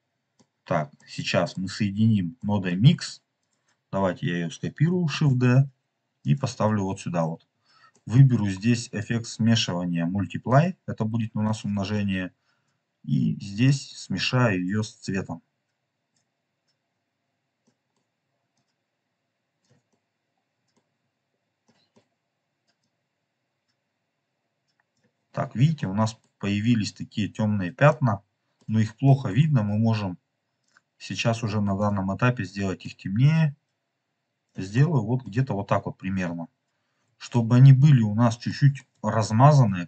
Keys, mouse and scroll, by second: 0.9 middle click, 2.3 middle click, 3.3 click, 5.0 shift+d, 6.1 click, 6.6 scroll up 3, 7.4 middle click, 7.4 scroll up 2, 7.8 middle click, 8.9 click, 11.1-11.4 scroll down 2, 11.4 middle click, 13.6-14.3 drag, 14.4 click, 16.1 click, 17.0-17.6 scroll down 2, 17.6 middle click, 18.4-19.6 drag, 19.8 middle click, 21.0 scroll up 2, 21.6 middle click, 22.7-24.9 drag, 25.3 scroll up 2, 25.7-26.2 middle drag, 26.6 scroll up 1, 27.2 scroll down 1, 27.8-28.7 middle drag, 29.0 middle click, 30.5 click, 31.7 click, 34.6 click, 34.8 middle click, 35.3 scroll up 2, 35.9 scroll down 2, 37.2 shift+middle click, 38.4 shift+middle click, 39.1 scroll up 1.